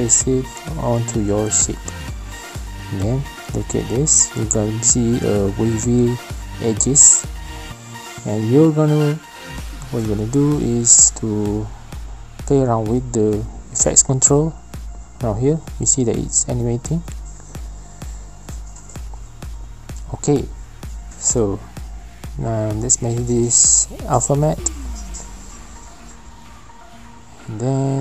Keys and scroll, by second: 3.8 v, 21.8 ctrl+z, 21.8 typing.